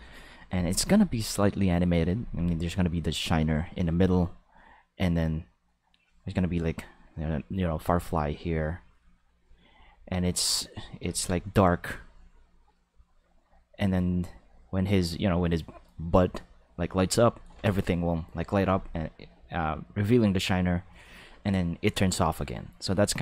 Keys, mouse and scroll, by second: 5.9 click, 6.7 click, 7.9 click, 8.3 click, 8.8 click, 9.3 click, 10.1 click, 11.3 click, 11.8 click, 14.8 click, 16.6 click, 17.0 click.